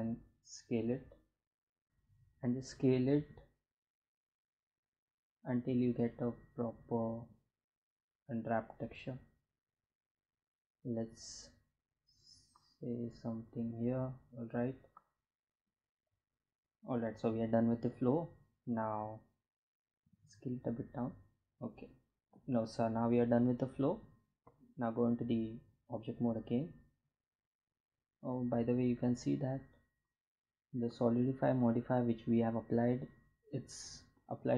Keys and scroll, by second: 1.8 s, 4.2 s, 5.8 s, 18.6 s, 24.2 Tab.